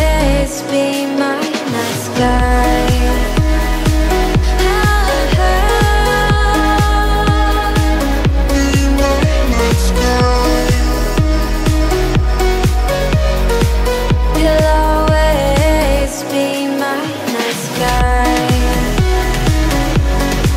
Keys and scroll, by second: 7.2 5.